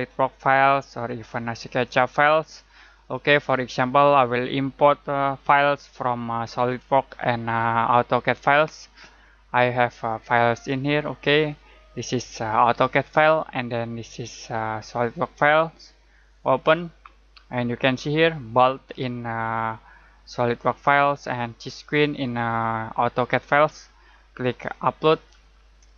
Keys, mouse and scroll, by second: 3.1 click, 9.6 click, 16.4 click, 25.1 click.